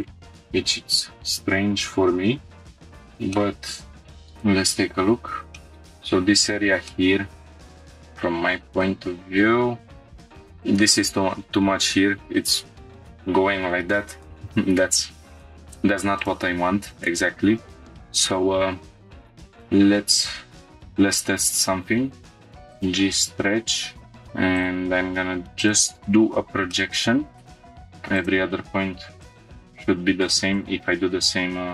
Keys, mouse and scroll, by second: 0.1 scroll down 1, 2.8 click, 2.8 scroll up 1, 3.3 middle click, 4.0 scroll down 4, 5.0 click, 5.6 shift+middle click, 6.4 scroll up 1, 6.9-8.8 middle drag, 9.7-10.4 scroll down 3, 10.2 shift+middle click, 10.2 scroll up 1, 14.3 scroll up 1, 16.3 scroll up 1, 18.7 Tab, 19.2 click, 19.2 2, 19.4 scroll down 1, 20.5 ctrl+click, 20.6 right click, 24.1 click, 26.7 middle click, 27.6 scroll up 1, 28.1 ctrl+click, 28.1 scroll down 1, 29.2 ctrl+click, 29.4 right click.